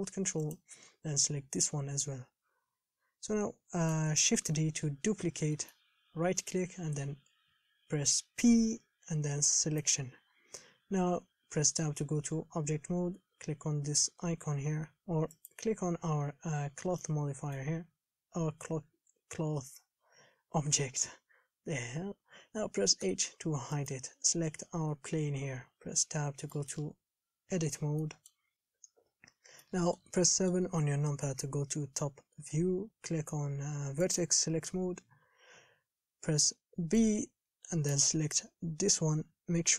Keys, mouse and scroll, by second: 0.7 ctrl+click, 2.3-4.6 middle drag, 4.6 shift+d, 10.0 p, 11.9 Tab, 15.7 click, 16.9 scroll down 2, 17.3-23.3 middle drag, 23.3 h, 24.1 click, 25.1 KP_7, 26.1 Tab, 26.8-28.8 shift+middle drag, 28.8-29.2 scroll up 3, 29.2 KP_7, 29.4-29.9 scroll up 2, 29.9-30.9 shift+middle drag, 30.9-34.3 scroll up 2, 34.3-38.2 drag, 38.2 b.